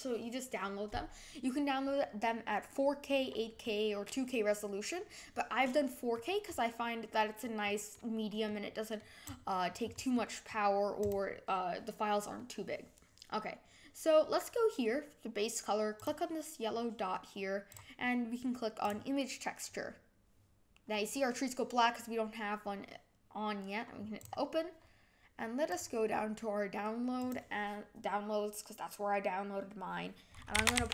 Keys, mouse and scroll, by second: 3.6-6.4 middle drag, 6.4-7.0 scroll up 4, 7.6-9.2 middle drag, 9.2 click, 9.8-10.1 scroll down 5, 10.1 middle click, 11.0 click, 17.0-17.6 drag, 18.9-20.7 drag, 24.1-27.3 drag.